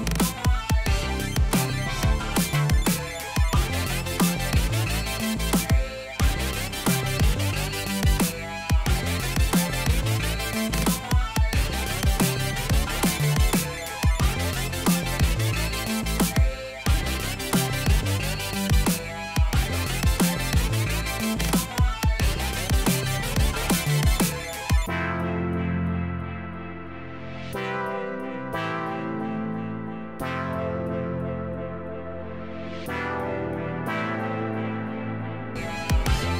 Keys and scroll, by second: 19.4 1, 23.5 3, 28.0 1, 35.2 Down.